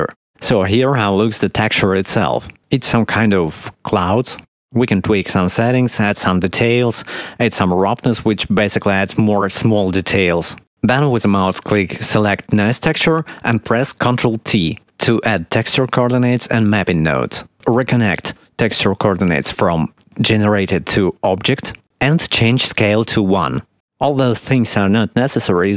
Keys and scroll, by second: 4.3 shift+a, 13.7 ctrl+t, 22.8 1.